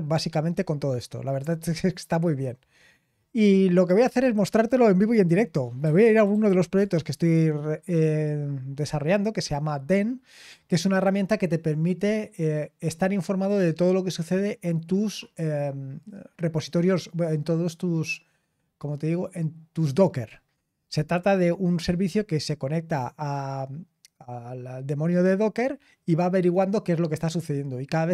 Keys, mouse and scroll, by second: 3.9-13.1 drag.